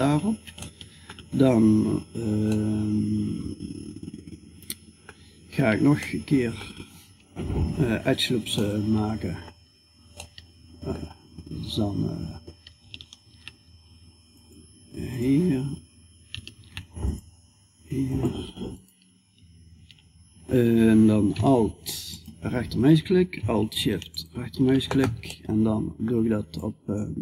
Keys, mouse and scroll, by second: 0.2-3.9 middle drag, 5.4 middle click, 7.0 KP_5, 9.7-12.7 middle drag, 12.7 ctrl+r, 16.0 ctrl+r, 26.0-27.2 drag.